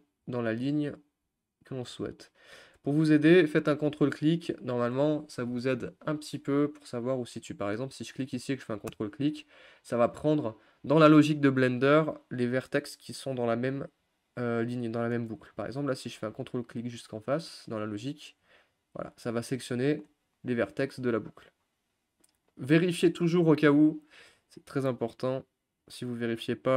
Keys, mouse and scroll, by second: 0.5 ctrl+click, 2.1 ctrl+click, 4.4-9.0 middle drag, 9.0 ctrl+click, 9.9-15.3 middle drag, 15.3 scroll down 1, 15.6 middle click, 16.0 scroll down 1, 16.1-17.5 scroll up 2, 17.5-18.1 scroll up 1, 18.1 ctrl+click, 18.6-20.8 middle drag, 20.8 scroll up 1, 21.0 middle click, 21.3-22.4 scroll down 1, 22.4-23.5 middle drag, 23.5 scroll up 1, 23.8 middle click, 23.9 scroll down 1, 24.2-26.7 middle drag.